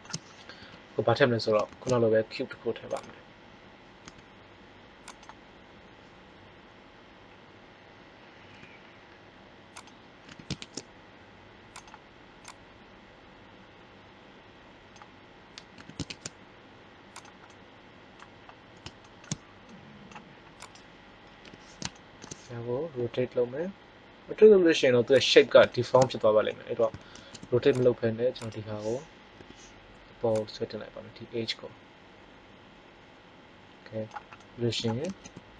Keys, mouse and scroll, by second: 0.5 KP_1, 1.6 shift+a, 3.9 s, 8.4 s, 10.0 click, 10.2 s, 15.7 s, 17.2 click, 17.5 middle click, 21.3 KP_3, 22.9 r, 27.0 ctrl+Tab, 29.3 KP_3, 35.0 ctrl+Tab.